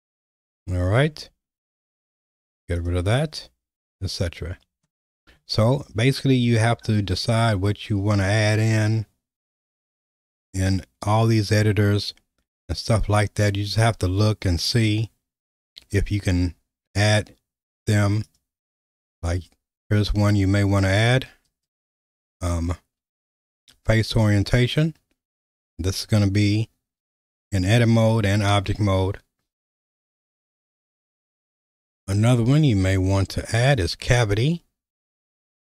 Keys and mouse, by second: 1.5 q, 8.2-9.6 drag, 14.8-16.5 right drag, 18.3-24.5 drag, 25.9 q, 33.7-35.6 drag.